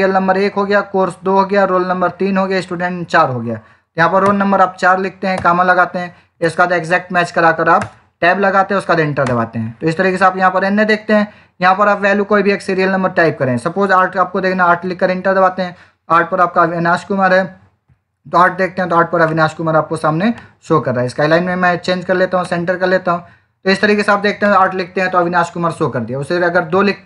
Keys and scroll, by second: 4.1 4, 6.2 Down, 9.1 Return, 9.9 Up, 10.9 Left, 14.1 8, 14.6 Return.